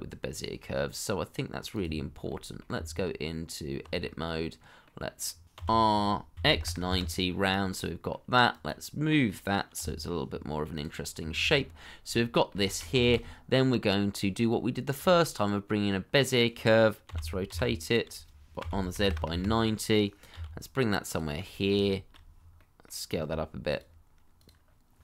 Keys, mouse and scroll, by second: 2.0 scroll down 1, 2.2 middle click, 2.7 Tab, 4.0 middle click, 5.5 r, 6.3 x, 6.5 KP_9, 6.8 KP_Enter, 7.7 middle click, 9.7 r, 11.2 Tab, 11.7 middle click, 12.6 shift+middle click, 13.0 shift+a, 17.0 r, 17.4 y, 18.6 z, 18.9 KP_9, 19.0 KP_0, 19.2 Return, 20.3 g, 21.3 middle click, 21.8 shift+middle click, 22.5 middle click, 23.1 s.